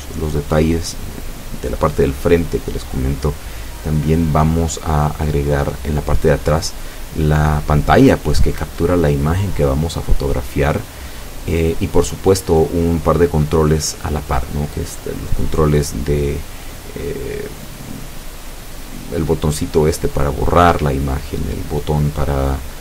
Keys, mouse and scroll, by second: 13.0-14.7 drag.